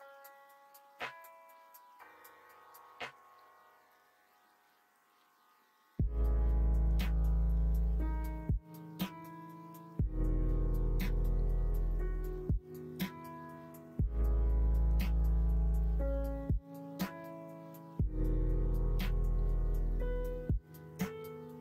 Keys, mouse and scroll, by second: 0.2 s, 5.6 ctrl+z, 6.2 middle click, 7.8 middle click, 8.8 middle click, 9.8 middle click, 11.9 ctrl+z, 12.4 middle click, 13.3 middle click, 15.9 middle click, 17.1 middle click, 19.1 ctrl+r.